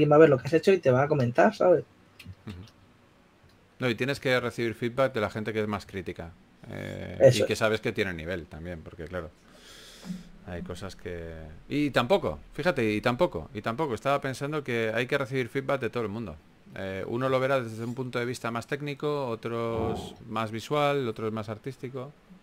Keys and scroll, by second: 2.7 s, 4.3 s, 6.7 4, 10.1 typing, 11.5 typing, 12.7 s, 20.1 s, 21.5-22.4 typing.